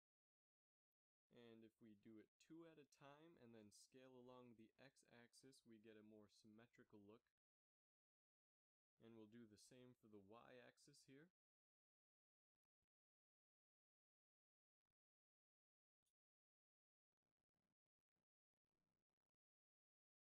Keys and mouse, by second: 1.5 ctrl+r, 2.0-3.3 drag, 2.2 ctrl+z, 2.4 ctrl+z, 2.8 ctrl+r, 5.6 s, 10.3 ctrl+r, 12.5 s.